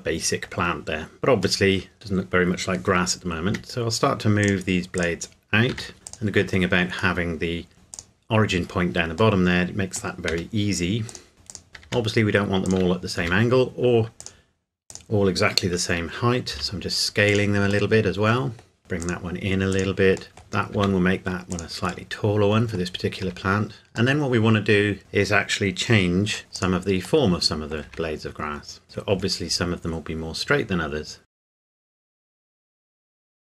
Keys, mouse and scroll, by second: 0.5 scroll down 1, 1.6 middle click, 1.9-3.5 scroll down 1, 3.5 r, 4.4 click, 5.7 r, 6.1 click, 7.2 middle click, 7.9 click, 9.4 middle click, 10.3 r, 11.1 click, 11.8 r, 12.7 click, 13.2 s, 14.2 click, 16.5 s, 17.3 click, 17.9 middle click, 18.8 r, 19.0 click, 20.3 middle click, 20.7 s, 21.5 click, 22.1 middle click, 23.2 Tab, 24.1 middle click, 24.5 middle click, 26.4 Tab, 26.5 click, 27.2 middle click, 27.8 Tab, 28.8 r, 29.1 scroll up 1, 29.3-30.5 scroll down 1, 31.3 click, 31.5 g, 31.7 click, 31.9 middle click, 32.0 click, 32.1 Tab, 32.2 middle click, 32.4 r, 32.5 click, 32.6 g, 32.9 click, 33.0 middle click, 33.1 click, 33.2 Tab, 33.3 shift+click.